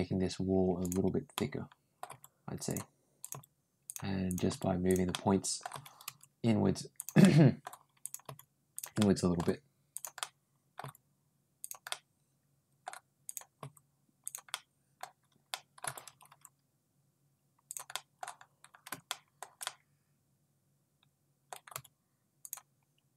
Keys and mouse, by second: 0.6 click, 1.1 middle click, 1.6 middle click, 1.9 g, 3.0 click, 3.1 g, 4.1 click, 4.3 g, 4.9 middle click, 5.5 g, 7.0 middle click, 7.8 click, 8.1 g, 8.8 middle click, 10.0 middle click, 10.0 g, 10.9 g, 11.7 middle click, 13.1 click, 13.4 g, 14.3 middle click, 15.3 middle click, 15.7 g, 17.7 middle click, 18.9 middle click, 19.4-21.3 middle drag, 21.5 g, 23.0 click.